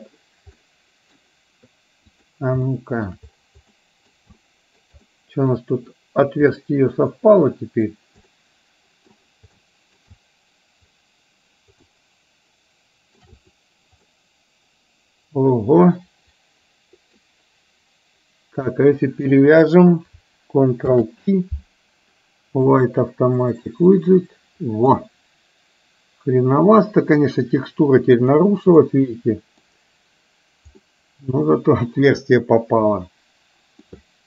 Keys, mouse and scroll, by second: 0.6 middle click, 2.7-3.2 shift+middle drag, 3.9 middle click, 4.5-4.9 shift+middle drag, 5.1 middle click, 6.6-8.0 middle drag, 8.2-9.2 middle drag, 9.6-10.1 shift+middle drag, 12.0-13.4 shift+middle drag, 14.2-17.2 middle drag, 19.5 shift+click, 20.9 ctrl+p, 25.0-27.4 middle drag, 28.2 click, 28.9-29.7 middle drag, 31.0-31.4 middle drag, 32.4-34.0 middle drag.